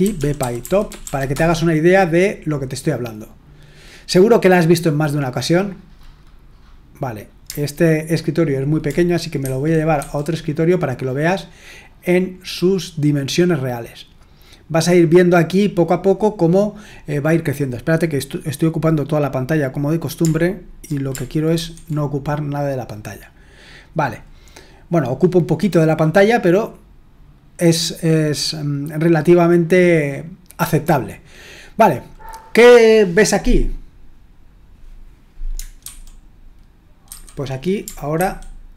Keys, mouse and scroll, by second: 0.0-1.5 typing, 9.5 super+", 10.0 super+2, 21.6 ctrl+1, 35.8 super+1, 37.0 super+2, 38.1 ctrl+1.